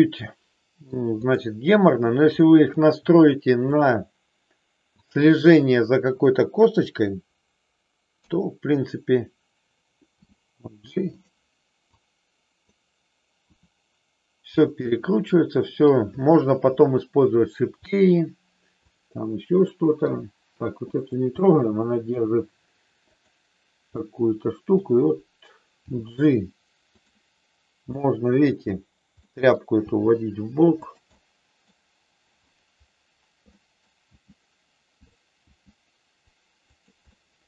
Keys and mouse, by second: 1.1 click, 2.3 middle click, 8.1 KP_3, 10.1 g, 11.9 click, 13.4 r, 14.5 click, 14.8-15.8 middle drag, 16.1 middle click, 17.9 middle click, 18.9 click, 20.0 r, 21.4 middle click, 23.9 middle click, 25.8 g, 27.9 middle click, 29.3 middle click, 29.8 g, 30.8 click, 31.0 middle click, 33.5 middle click, 34.0 g, 35.0 click, 35.4 g, 36.6 click, 37.1 middle click.